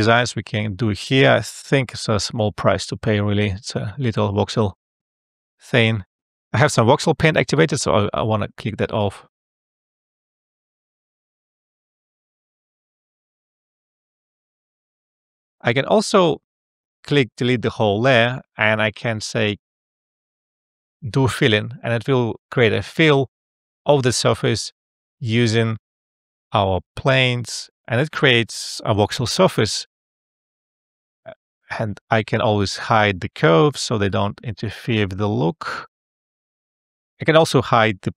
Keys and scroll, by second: 1.1 e, 2.6 space.